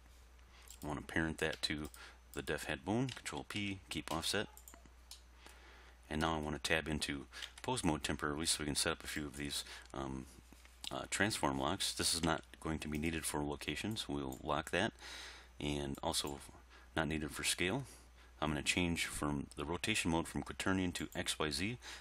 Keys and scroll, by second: 3.4 ctrl+p, 7.5 Tab, 12.3 g.